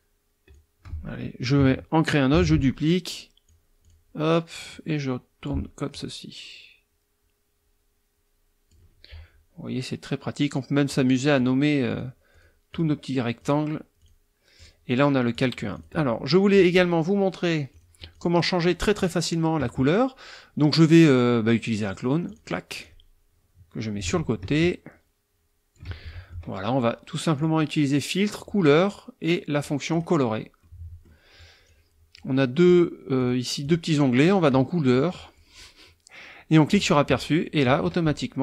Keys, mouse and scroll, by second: 2.3 ctrl+d, 2.8-3.7 ctrl+drag, 3.8 click, 4.7-5.6 drag, 5.9-8.9 drag, 10.9 click, 11.4 click, 11.9 click, 12.3 click, 12.7 click, 13.4 click, 14.0 click, 14.6 click, 15.3 click, 15.7 click, 16.1 middle click, 17.7 click, 18.1 click, 18.4 middle click, 19.0 click, 22.3 click, 22.8-25.9 drag, 25.9 ctrl+middle click, 27.4 click, 29.9 click, 30.6 middle click, 31.7 click, 32.6 click, 33.2 click, 33.6 click, 34.2 click, 35.1-35.5 drag, 36.7 click.